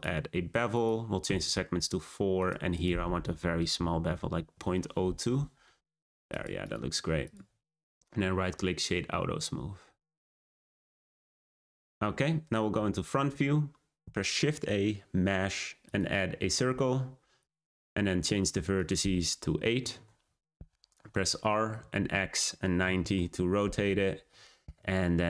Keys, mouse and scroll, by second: 0.7-2.5 drag, 2.7-5.5 drag, 5.5 scroll down 1, 5.7 click, 6.2 click, 6.5 right click, 7.6-8.1 drag, 8.1-10.1 middle drag, 10.1-10.6 scroll down 2, 10.6-11.7 middle drag, 11.7 `, 14.0 shift+a, 17.3-21.2 drag, 21.2 r.